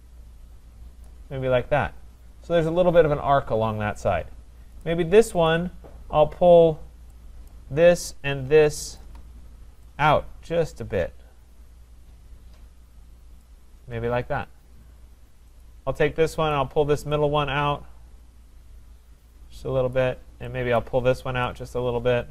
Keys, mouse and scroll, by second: 1.0 click, 3.5-4.3 scroll, 4.3-4.9 scroll, 4.9 click, 5.5 click, 7.5 click, 9.0 shift+click, 13.4 click, 15.6 click, 16.5 click, 19.9 click, 20.8 click.